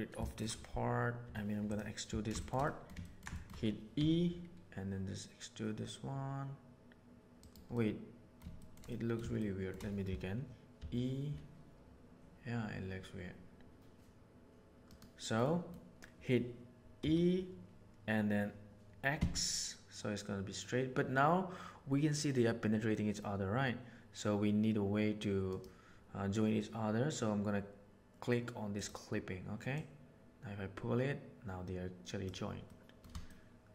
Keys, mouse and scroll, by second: 0.2 shift+middle click, 1.2 3, 1.6 middle click, 2.3 shift+middle click, 2.6 middle click, 3.0 ctrl+middle click, 3.3 shift+middle click, 3.9 e, 7.7 middle click, 8.5 shift+middle click, 8.9 middle click, 9.3 shift+middle click, 10.7 e, 15.4 middle click, 17.0 e, 28.7 click, 29.7-32.3 drag, 32.6 middle click, 33.2-33.7 shift+middle drag.